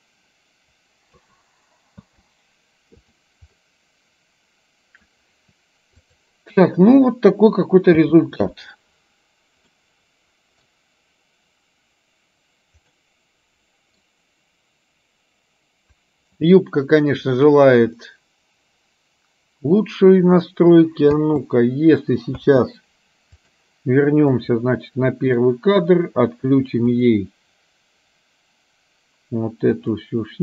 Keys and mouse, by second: 2.2 space, 3.1 click, 3.6-5.1 middle drag, 6.9 middle click, 8.1 space, 9.9-10.9 middle drag, 13.1-14.2 middle drag, 18.2-21.4 middle drag, 22.6 space, 24.5 click, 25.2 middle click, 30.0 click.